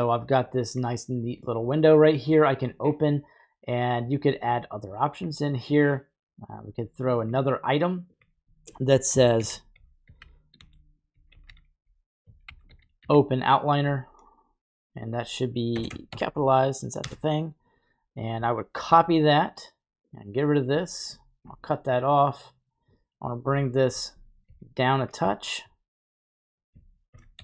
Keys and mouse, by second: 2.0 middle click, 7.2 click, 8.1-17.1 drag, 18.1-21.0 drag, 21.7 right click, 22.0 middle click, 23.1-23.9 drag, 24.4 g, 25.4 middle click, 26.5 click, 27.1 shift+d, 27.3 g.